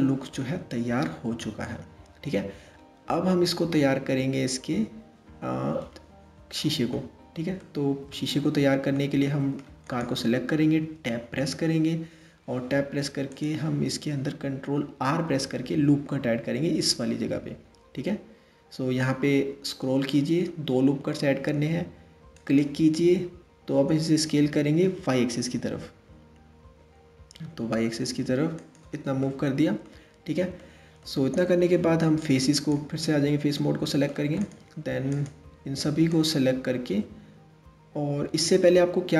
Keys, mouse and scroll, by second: 7.2-9.5 middle drag, 9.5 click, 10.4 Tab, 12.9 click, 14.7 ctrl+r, 23.4 s, 28.9 middle click, 29.5-30.2 scroll up 2, 30.2-32.2 middle drag, 32.2 click, 33.2 middle click, 34.0 click, 34.8 click, 35.7 shift+click.